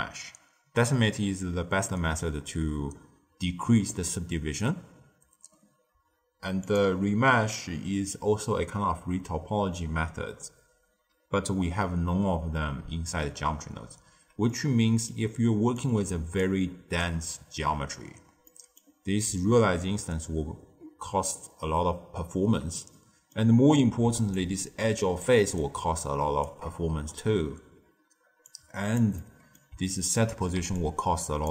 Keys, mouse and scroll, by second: 6.6-9.7 drag, 14.4-15.7 middle drag, 15.7 click, 18.4-19.2 middle drag, 19.2-22.4 d, 22.9 middle click, 23.6-24.0 scroll down 1, 24.0 d, 24.3 click, 25.2 d, 25.5 right click, 26.4 d, 26.5 d, 28.4 click, 29.1-30.5 middle drag, 30.5 d, 30.7-31.5 drag.